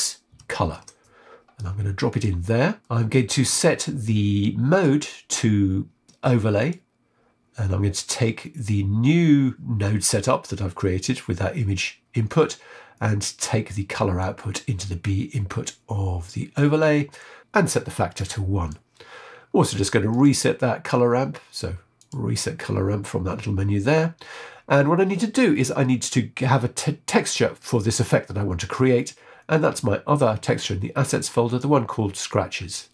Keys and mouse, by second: 2.8 shift+middle click, 4.7-6.6 drag, 14.2 click, 16.3 click, 17.4-18.6 drag, 19.4 ctrl+z, 20.0-22.0 drag, 27.5 click, 29.6 click.